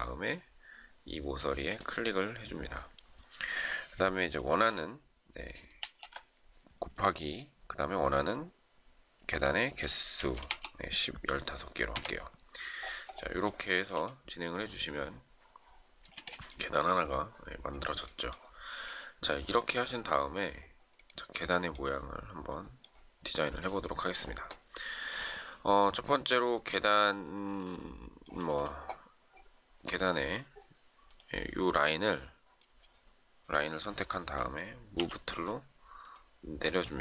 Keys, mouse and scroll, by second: 5.6 *, 9.9-10.3 typing, 11.9 Return, 13.4 shift+middle click, 16.1 space, 34.9 m.